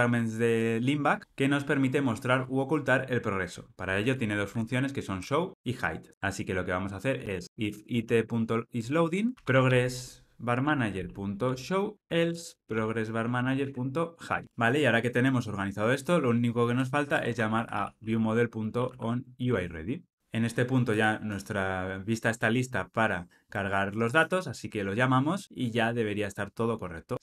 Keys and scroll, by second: 8.8 Return, 10.6 Return, 19.5 Return, 25.4 ctrl+r.